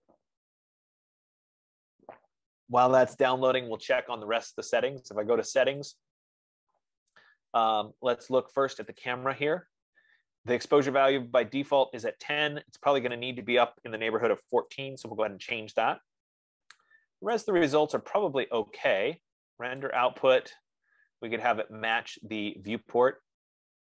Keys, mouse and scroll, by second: 6.3-8.4 drag, 9.3 click, 13.5 click, 14.3-15.6 typing, 19.2 click, 20.4 click, 22.4 click.